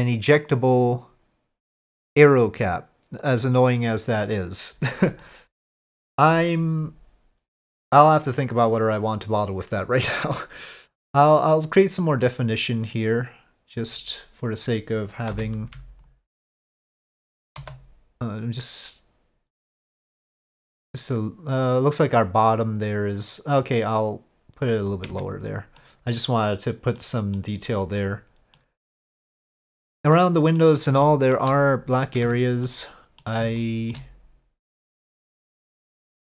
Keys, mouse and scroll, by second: 12.1 click, 12.8 click, 14.5 click, 15.3 3, 16.5 alt+click, 17.6 e, 25.3 Tab, 25.8 middle click, 27.0-27.4 middle drag, 28.0-28.6 middle drag, 30.1-30.6 middle drag, 31.0-31.4 shift+middle drag, 32.2 Tab, 32.6 middle click, 33.6 shift+middle click.